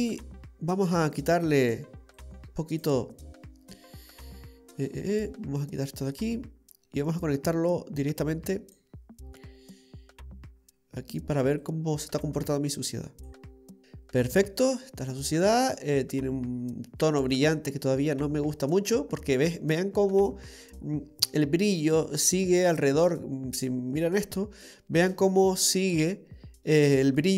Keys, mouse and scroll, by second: 0.1-0.7 scroll down 7, 0.7-1.0 scroll down 2, 1.0 middle click, 2.2 click, 3.1-3.7 scroll up 6, 3.7 middle click, 5.6 click, 7.3 click, 11.6 click, 13.8 middle click, 13.8 scroll up 3, 15.8 middle click, 22.9 scroll up 1, 24.7 middle click, 26.4-26.8 scroll down 2, 26.6 middle click.